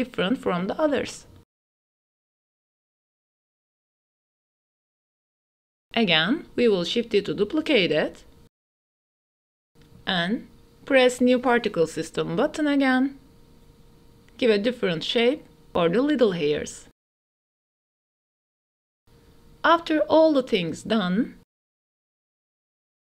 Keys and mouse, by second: 0.8 ctrl+s, 1.1-1.4 drag, 1.6 click, 2.2-4.9 drag, 5.1 ctrl+s, 5.8 ctrl+s, 6.0 ctrl+s, 6.5 drag, 6.8-8.2 typing, 7.3 drag, 8.6 ctrl+s, 9.7 click, 10.5 ctrl+s, 10.8 click, 11.0 ctrl+s, 11.1-12.2 drag, 12.8 click, 13.3-14.9 drag, 15.1 click, 15.6 click, 16.2 click, 16.8 click, 17.6 ctrl+s, 17.6 click, 18.4 click, 18.7 click, 19.6-20.3 drag, 20.5 ctrl+s, 21.0 ctrl+s, 21.3 click, 22.3-23.1 typing, 22.8-23.1 drag.